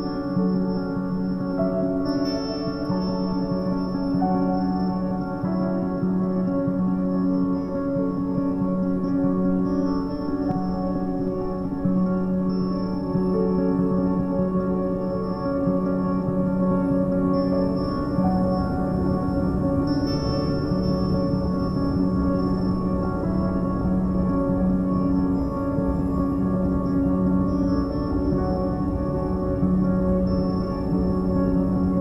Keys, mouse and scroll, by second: 0.6-5.8 drag, 5.8 ctrl+3, 6.2 Tab, 7.1 2, 7.2 click, 7.9 g, 9.9 click, 10.3 g, 11.7-13.4 middle drag, 13.4 click, 13.8-15.0 middle drag, 15.0 click, 15.4 click, 16.2 g, 18.0 middle click, 18.8 a, 19.0 a, 19.9 click, 20.2 g, 21.3 click, 21.7 g, 23.2 Tab, 23.4-23.9 middle drag, 23.9 a, 24.1-24.5 scroll down 2, 24.5-24.8 middle drag, 24.8-25.2 scroll down 3, 25.2-25.9 shift+middle drag, 25.9-26.3 scroll up 1, 26.3-27.4 shift+middle drag, 27.4-27.8 scroll down 1, 27.8-28.4 shift+middle drag, 28.4 shift+a.